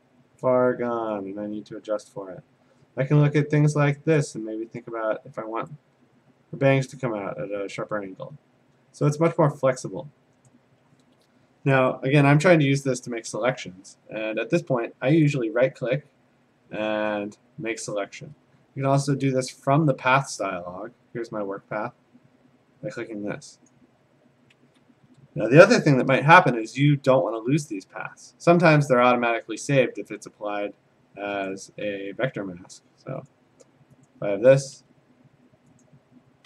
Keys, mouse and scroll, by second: 0.4 click, 2.1 click, 4.8 click, 6.9 click, 10.5 click, 15.3 right click, 19.1 click, 20.3 click, 23.7 click, 26.0 ctrl+d, 28.9 click, 31.5 click, 33.3 click, 34.1 click, 34.8 a, 35.8 click.